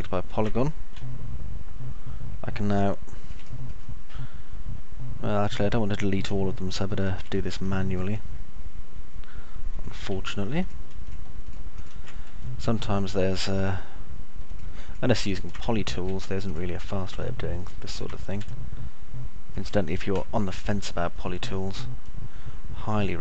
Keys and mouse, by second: 0.0 ctrl+click, 1.1-3.5 alt+middle drag, 3.6 middle click, 4.0-7.5 alt+middle drag, 7.8 middle click, 10.1 q, 12.6 alt+middle click, 14.6 ctrl+click, 15.5 ctrl+click, 15.8 alt+middle click, 16.6 ctrl+click, 17.5 middle click, 18.6-19.8 alt+middle drag, 20.5 Delete, 21.5-23.2 alt+middle drag.